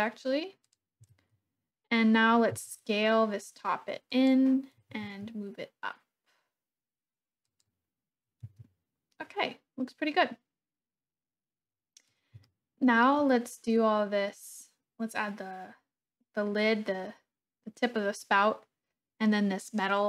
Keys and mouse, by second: 0.6 click, 1.0 Tab, 2.5 s, 4.2 click, 4.8 g, 5.1 z, 7.4 click, 8.5 Tab, 12.4-13.0 shift+drag.